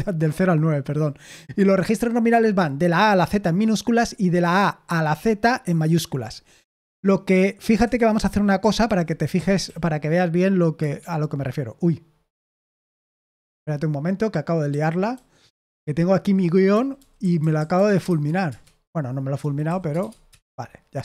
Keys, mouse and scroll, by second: 7.8 Escape, 8.9-10.1 typing, 12.6 ctrl+p, 13.3 Return, 14.6-18.0 typing, 18.4 Return, 19.1-20.4 typing.